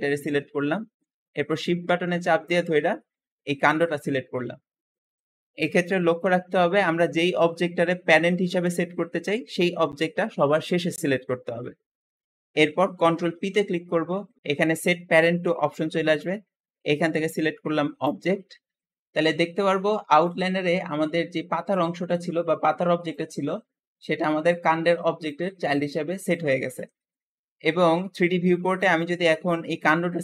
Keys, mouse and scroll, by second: 0.6 shift+middle click, 1.0 scroll up 2, 3.6 shift+click, 13.4 ctrl+p, 18.7 scroll down 2, 19.9 click, 27.1 Escape, 27.6-28.5 scroll down 2, 28.5 click, 29.1 scroll down 1, 30.1 g.